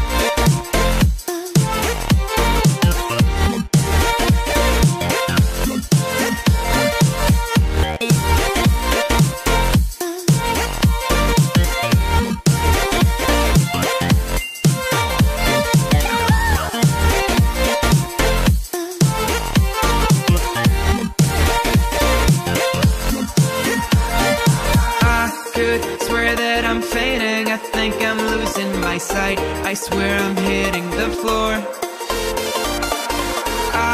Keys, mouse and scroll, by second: 5.4 click, 5.8-6.7 scroll up 1, 7.8 alt+shift+click, 9.0-11.3 drag, 16.1 click, 16.7 middle click, 17.2 middle click, 18.7 Tab, 19.1 Tab, 21.4 KP_1, 25.1 g, 26.6 click, 27.1 ctrl+z, 29.1-30.4 middle drag, 30.7 ctrl+z, 31.1 ctrl+z, 31.6 ctrl+z, 31.9 ctrl+z, 32.4 middle click, 33.1 click.